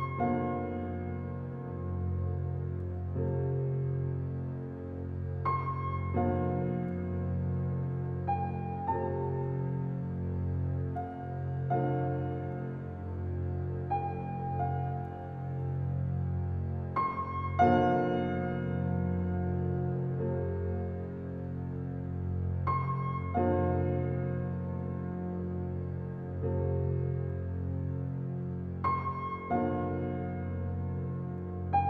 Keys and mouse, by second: 2.8-3.5 typing, 8.5-10.3 drag, 10.7-11.7 drag, 12.3-13.7 typing, 18.0-19.0 typing, 20.7-21.6 drag, 21.8 click, 22.1-23.3 drag, 23.5-24.7 drag, 27.5 click, 29.7 1, 30.8 a.